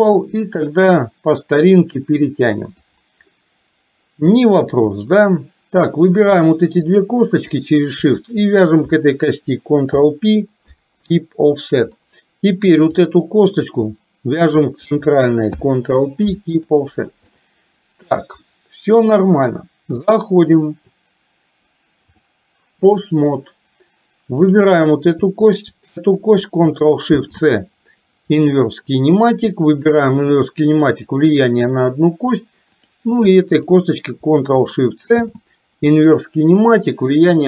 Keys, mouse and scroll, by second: 0.7-3.0 drag, 5.0 click, 7.0 shift+click, 8.3 shift+click, 10.0 ctrl+p, 12.1 middle click, 13.1 click, 14.5 shift+click, 15.6 ctrl+p, 17.3 middle click, 18.5 middle click, 20.2-22.2 drag, 25.5 shift+click, 29.7 click, 31.0 click, 32.8 click, 33.6 shift+click, 35.2 ctrl+shift+c.